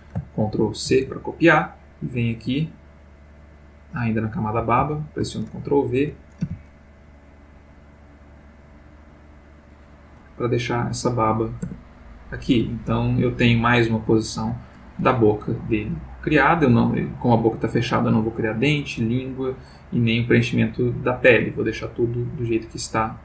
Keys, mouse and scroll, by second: 0.8 ctrl+c, 1.9 click, 3.5 click, 4.8 ctrl+v, 6.4 g, 9.8 click, 11.6 Tab, 12.7-14.6 ctrl+middle drag.